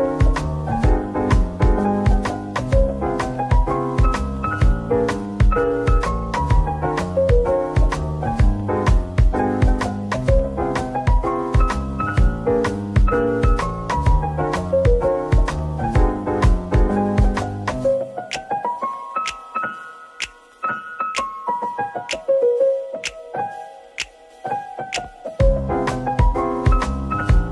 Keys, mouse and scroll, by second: 0.2 /, 1.1 scroll up 1, 1.8 middle click, 5.6 typing, 6.9 typing, 8.2 middle click, 13.4-14.4 scroll up 1, 16.3 shift+click, 19.4 shift+click, 20.4 shift+click, 21.2 middle click, 21.7 shift+click, 22.7 shift+click, 23.0 shift+middle click, 23.7 /.